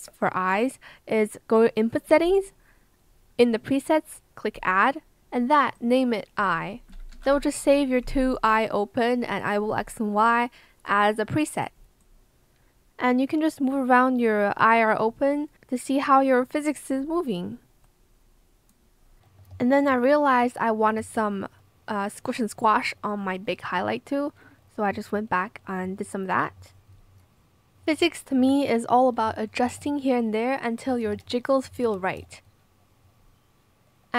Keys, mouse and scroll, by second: 6.9-7.8 typing, 21.0 click, 21.0 b, 29.6 KP_0, 29.6 KP_Decimal, 29.8 Return, 29.8 KP_7, 31.2 ctrl+z, 31.8 KP_Decimal, 32.1 KP_6, 32.2 Return.